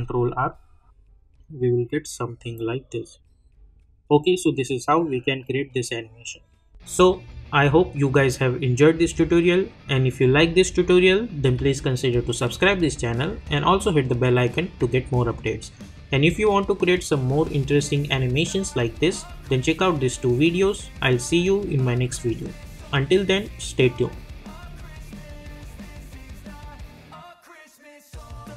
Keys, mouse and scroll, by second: 4.1 click.